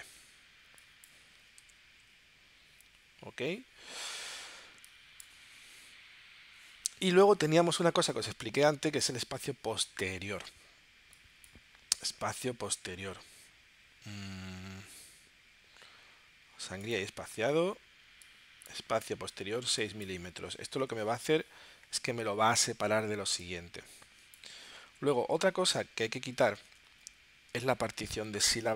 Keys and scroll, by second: 1.6 9, 2.1 Tab, 20.8 6, 21.5 Tab, 26.7 super+Tab.